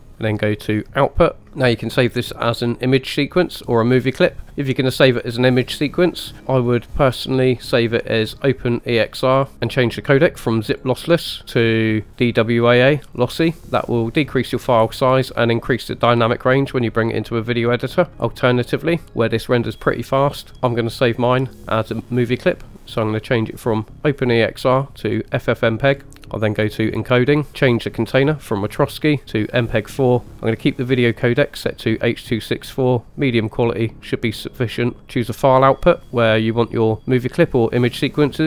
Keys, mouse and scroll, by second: 0.9-1.3 drag, 6.6-9.5 drag, 10.7-12.3 drag, 18.1 click, 22.5-25.2 drag, 25.9-26.5 scroll down 1, 26.5 click, 26.5-27.5 scroll down 2, 27.5 click, 28.7-29.7 drag, 37.9 click.